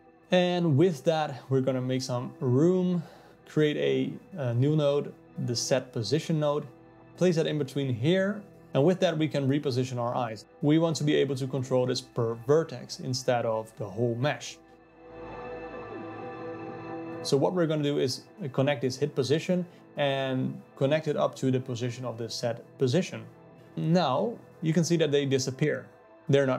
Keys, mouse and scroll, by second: 0.0 middle click, 0.2 shift+a, 5.0 click, 6.1 click, 7.6-14.4 alt+middle drag, 14.4-17.4 drag, 19.6 click, 20.9 click, 25.9 z.